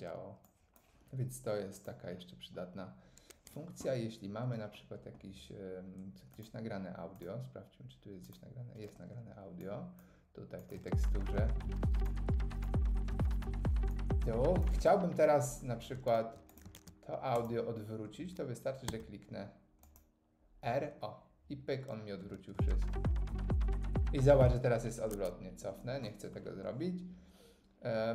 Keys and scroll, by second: 16.7 super+e, 18.9 r, 25.1 super+z.